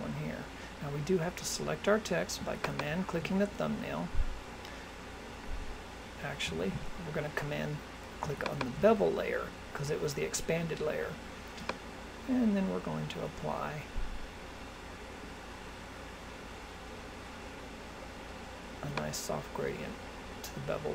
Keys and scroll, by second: 6.6 super+z.